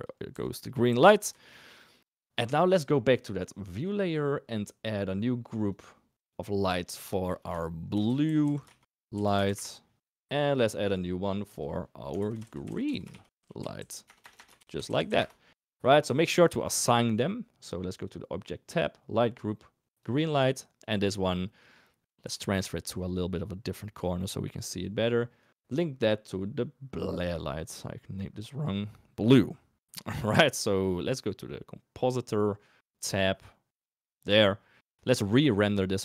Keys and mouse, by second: 0.3 r, 0.9 g, 1.3 shift+middle click, 1.8 middle click, 3.7 click, 6.5 click, 6.7-9.6 drag, 11.1 click, 11.5-15.1 drag, 12.8 e, 14.1 BackSpace, 14.3 BackSpace, 19.2 click, 20.9 click, 22.5 g, 25.4-28.7 drag, 30.9-34.2 drag, 34.9 shift+click.